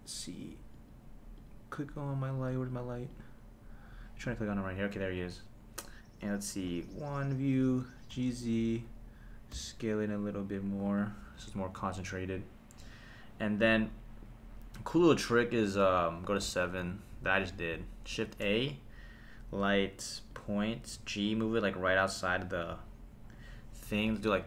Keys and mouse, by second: 0.0 click, 0.7 click, 1.4 click, 2.5 click, 3.3 drag, 4.2 click, 6.7 KP_1, 7.7 g, 8.1 z, 8.7 click, 9.5 s, 10.8 click, 11.4 KP_0, 16.4 KP_7, 18.2 shift+a, 20.9 g, 22.2 click, 23.3-24.4 drag, 24.2 KP_0, 24.3 KP_0.